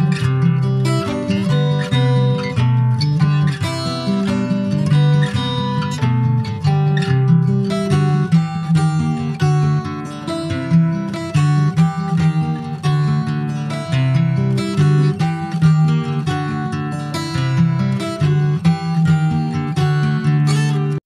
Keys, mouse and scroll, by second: 10.8 click, 12.6 click, 13.4-14.3 scroll down 2, 14.3-15.5 drag, 15.5 scroll down 1, 15.6 middle click, 16.0 scroll up 1, 16.2 shift+middle click, 16.8-17.6 scroll down 10, 17.6 shift+middle click, 18.2 scroll down 5, 18.5 shift+middle click, 19.1-19.7 scroll up 6, 19.9 `.